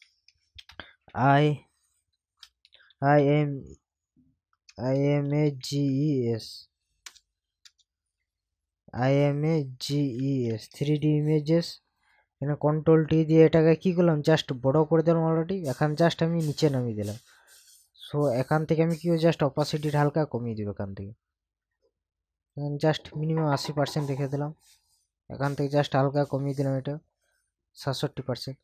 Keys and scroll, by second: 0.0 shift+d, 0.6 space, 2.4 BackSpace, 2.9 shift+i, 3.2 shift+m, 5.3 shift+a, 5.6 g, 5.9 e, 7.0 BackSpace, 9.8 shift+g, 10.2 shift+e, 10.5 shift+s, 12.9 ctrl+t.